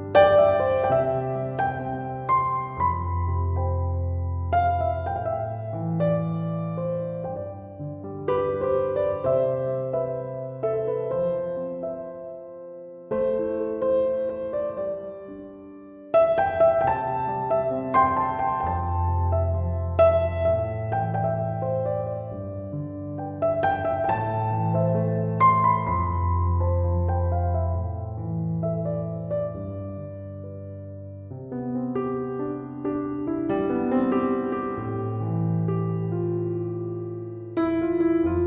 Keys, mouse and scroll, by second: 3.3 1, 3.5 5, 3.8 Return, 7.3 3, 7.5 ., 7.8 5, 8.1 Return, 11.1 Escape, 27.9 Escape, 35.3 f.